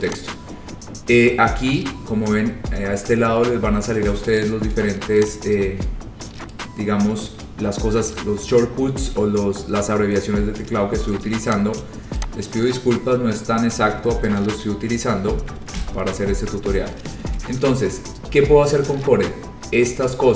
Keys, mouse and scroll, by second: 0.3 click, 5.5-10.5 drag, 11.9 click, 12.6 click, 15.8 Delete, 16.7-20.3 scroll.